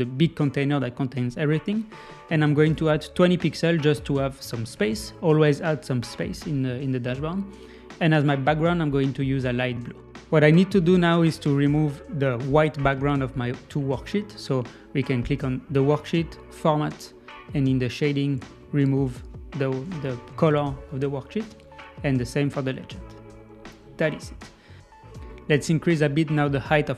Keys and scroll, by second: 3.9 Left.